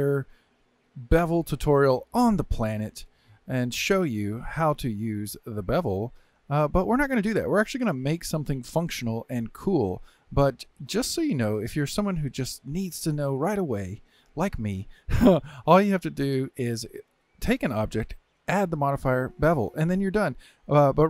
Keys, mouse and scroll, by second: 1.7-4.7 drag, 6.0 click, 7.0-9.8 drag, 10.6-11.6 middle drag, 11.6 scroll up 2, 11.9-13.5 shift+middle drag, 13.5 scroll up 2, 13.9-17.5 shift+middle drag, 18.4 click, 19.4-20.6 drag, 20.6-21.0 scroll up 4.